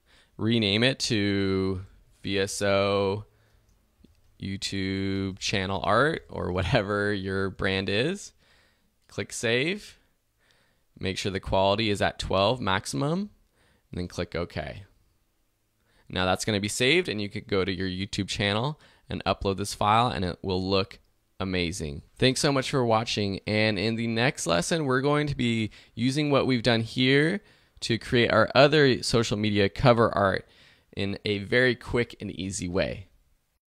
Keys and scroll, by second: 1.6-3.9 typing, 5.3-6.1 typing, 7.2 shift+a, 7.4 shift+r.